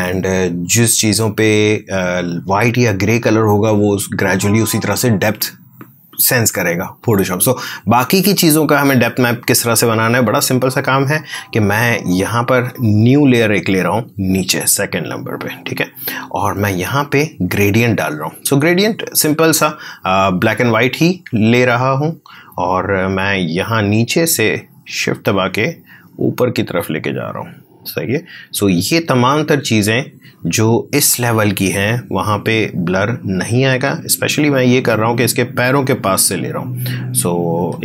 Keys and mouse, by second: 12.0 click, 12.9 click, 16.4 click, 19.4-30.3 drag, 30.5 space, 30.9-33.7 drag, 33.7-37.8 drag.